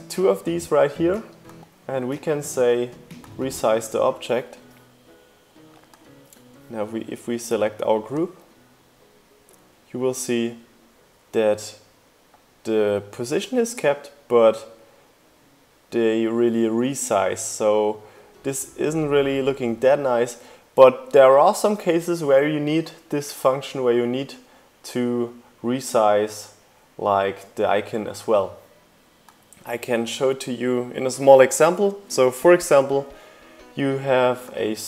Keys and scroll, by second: 30.1 u, 30.9 o.